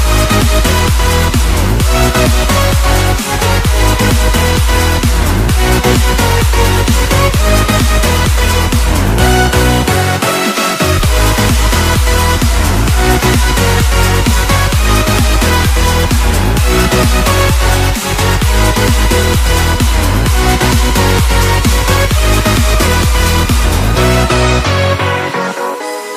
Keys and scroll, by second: 3.6 ctrl+-, 4.7 ctrl+=, 7.0 space, 9.4 space, 10.1 ctrl+z, 14.0 space, 16.8 space, 19.6 space, 20.5 space, 23.0 space, 25.8 space.